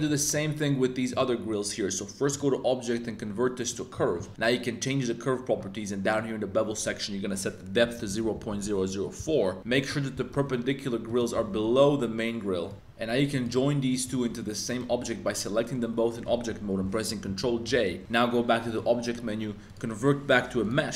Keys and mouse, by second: 0.0 middle click, 1.1-3.7 drag, 6.0-9.2 drag, 8.4 0, 9.7 middle click, 10.1 g, 10.3 z, 11.3 g, 11.5 z, 12.6 click, 13.3 click, 13.5-13.9 middle drag, 14.1 shift+click, 14.7 shift+click, 15.5 middle click, 17.2 super+j, 18.6-20.7 right drag.